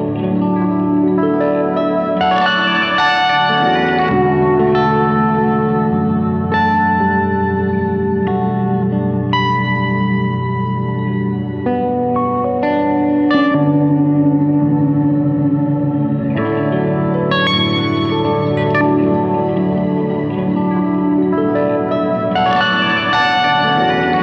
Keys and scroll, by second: 2.8 Escape, 18.2 shift+F2, 18.5 Escape.